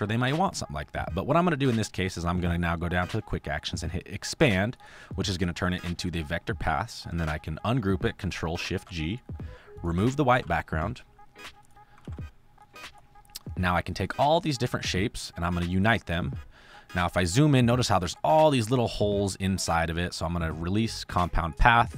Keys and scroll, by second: 8.2 ctrl+shift+g, 10.2 ctrl+x, 11.9 ctrl+x.